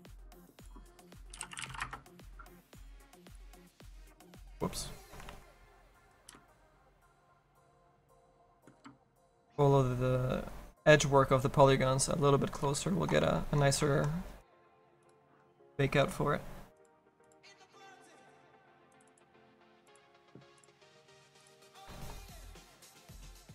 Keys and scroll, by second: 5.8 ctrl+z.